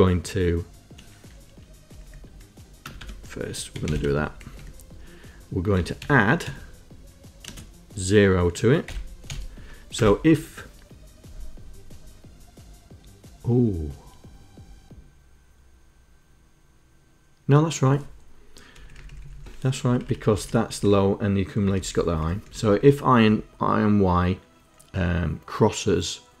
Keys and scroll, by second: 1.9 Up, 2.9 Return, 3.0 Tab, 3.6-4.4 typing, 4.4 Down, 4.6 Down, 5.6-7.5 typing, 9.3 0, 10.0 Return, 18.8 Up, 19.0 Up, 19.2 Up, 19.8 Right, 20.0 Right, 20.1 Right, 20.3 Right, 20.7 Down, 21.6 Down, 21.8 Down, 22.1 Down, 22.4 Up, 22.6 Up, 23.2 Down.